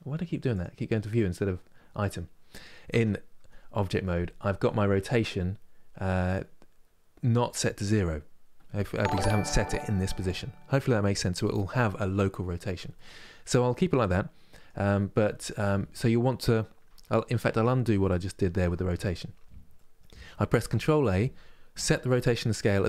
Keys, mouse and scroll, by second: 0.2-2.6 drag, 2.6 Tab, 10.4-16.8 middle drag, 16.8 ctrl+z, 17.2 ctrl+z, 19.4 middle click, 20.2 ctrl+a.